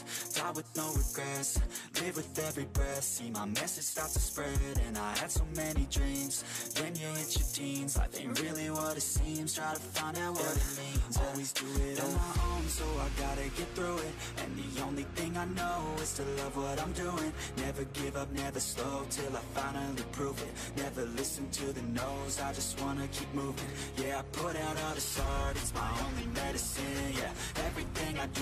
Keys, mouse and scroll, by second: 0.0-2.0 typing, 3.6 r, 3.9 g, 5.2 s, 6.6-15.9 typing, 16.9 e, 17.7 scroll up 2, 17.9 click, 18.3 shift+click, 18.8 e, 19.6 scroll down 4, 20.4 shift+middle click, 20.5 scroll up 3, 20.9 click, 21.8-24.5 typing, 26.5 r, 27.1 g, 27.8 e.